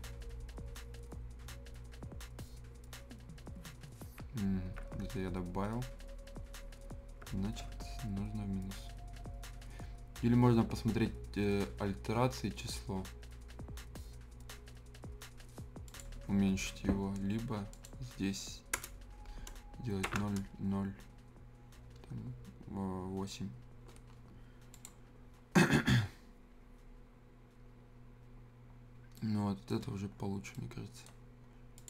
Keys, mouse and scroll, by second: 4.7 ctrl+z, 5.9 scroll up 1, 7.6 ctrl+t, 15.8 click, 18.8 BackSpace, 24.7 click, 28.9 click, 29.0 scroll up 1, 29.1 right click, 29.8 scroll down 1, 30.2 scroll up 1, 30.5 right click, 31.7 click.